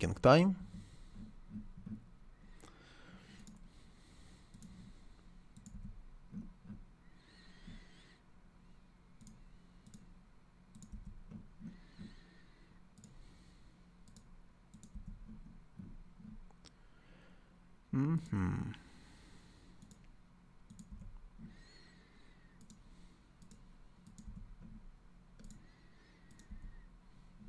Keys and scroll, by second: 0.6 l, 5.7 c, 10.9 c, 14.9 c, 20.9 c, 24.2 c, 26.4 c.